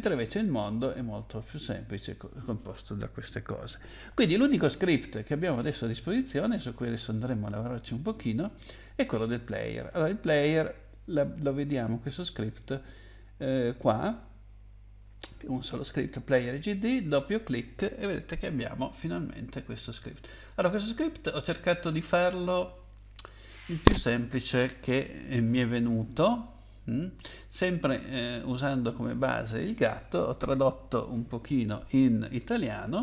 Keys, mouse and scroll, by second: 0.5 click, 12.3 click, 16.4 click, 16.7 click, 19.8 click, 27.4 click.